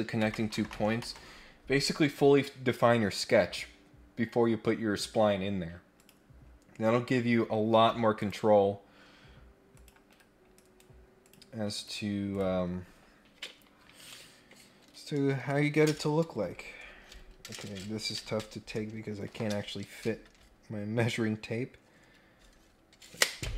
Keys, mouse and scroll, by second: 3.3-3.8 scroll down 2, 6.0 click, 6.6-7.0 scroll down 1, 7.0-7.4 scroll up 2, 8.1 click, 9.7 click, 10.1 Escape, 10.5 right click, 11.7 click, 12.3 click.